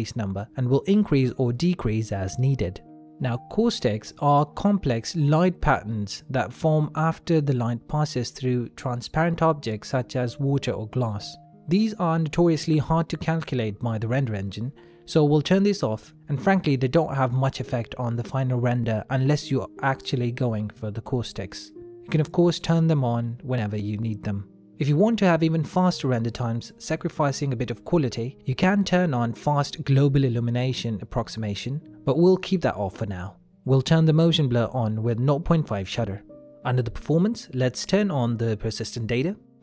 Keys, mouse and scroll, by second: 1.2 middle click, 3.7 middle click, 5.2 click, 5.9 middle click, 14.1 middle click, 18.0 click, 20.1 middle click, 24.3 middle click, 28.5 click, 31.9 middle click, 33.3 click, 35.1 middle click, 35.8 click, 36.9 middle click, 38.1 click, 38.7 middle click.